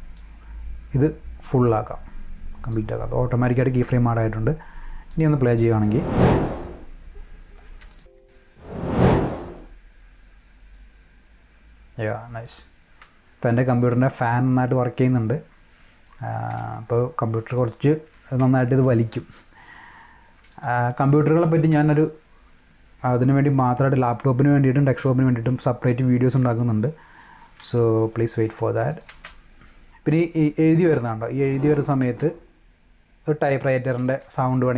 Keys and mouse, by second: 1.6-2.7 drag, 5.1 click, 5.4 space, 7.6 space, 7.9 click, 8.0 click, 8.3 space, 12.9 space, 16.3 space, 17.5 click, 18.2 space, 20.2 space, 20.5 click, 20.9 space, 21.5 space, 28.9 click, 29.1 space, 29.6-31.8 drag, 32.0 space, 33.9 space.